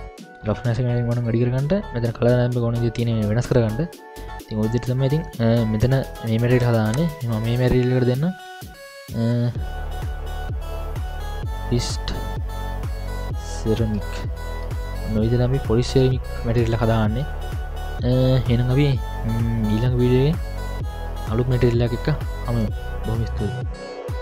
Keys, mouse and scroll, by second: 6.9-16.8 drag, 17.8 middle click, 17.8 scroll down 4.